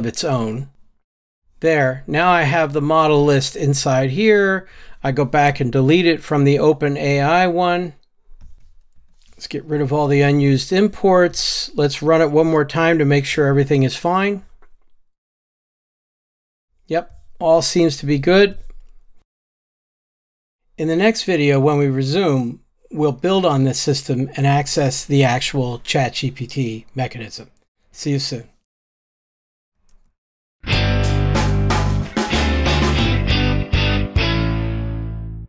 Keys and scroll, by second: 0.7 super+v, 9.0 ctrl+alt+o, 12.8 ctrl+r.